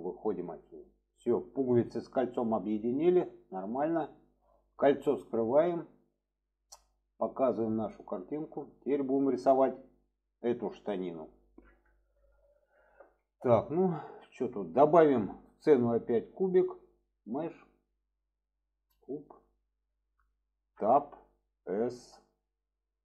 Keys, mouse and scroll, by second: 1.0-2.5 middle drag, 3.3 shift+middle drag, 6.2 click, 7.6 click, 8.2 shift+middle drag, 9.1 shift+middle drag, 13.3-13.7 shift+middle drag, 14.4-15.1 shift+middle drag, 16.6-18.9 drag, 20.7 Tab, 21.7 s.